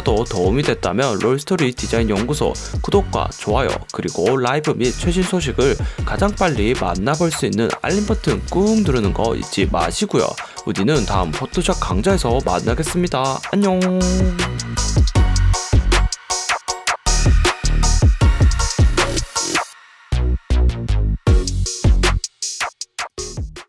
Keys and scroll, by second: 7.4 super+g, 8.3 super+t, 12.1 Return, 12.6 shift+Left, 13.1 shift+Down, 13.5 shift+Right, 13.9 shift+Down, 15.5 v.